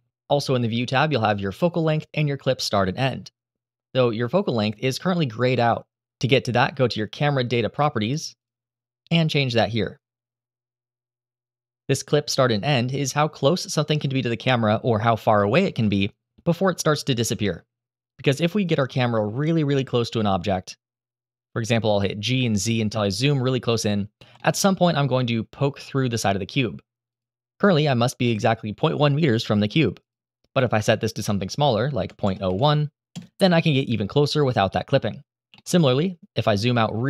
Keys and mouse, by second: 9.5 click, 10.4-11.8 drag, 19.3 g, 19.4 z, 23.9 g, 24.1 click, 30.1-32.8 drag, 35.5 g.